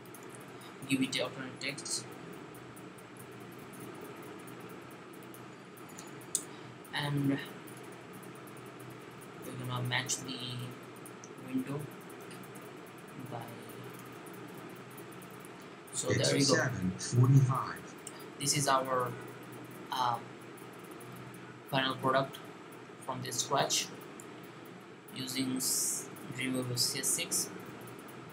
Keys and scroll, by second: 1.6-4.3 typing, 9.2 3, 12.0 2.